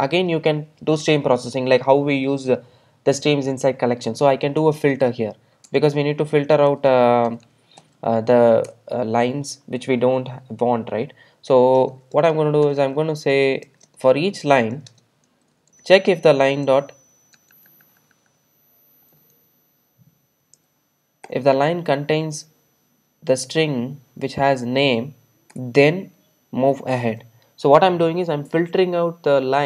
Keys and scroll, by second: 8.7 Return, 21.3 Return.